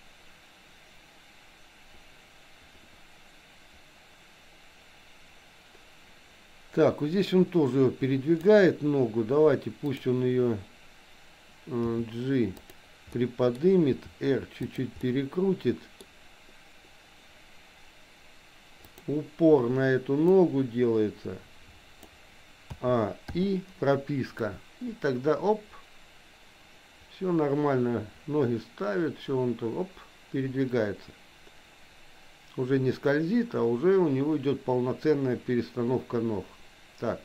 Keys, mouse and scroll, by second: 9.9 click, 11.8 g, 13.1 middle click, 13.1 scroll up 1, 14.1 r, 15.1 middle click, 15.9-16.9 scroll down 1, 18.8 click, 20.4-22.2 drag, 22.7 a, 23.4 i, 24.4-37.2 drag.